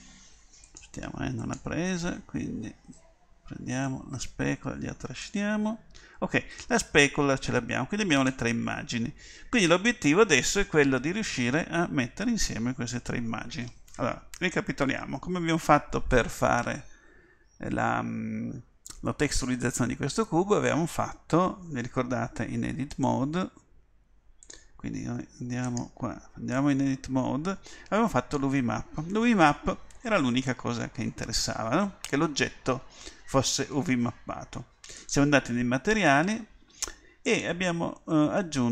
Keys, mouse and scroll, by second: 25.2 Tab, 26.6 Tab.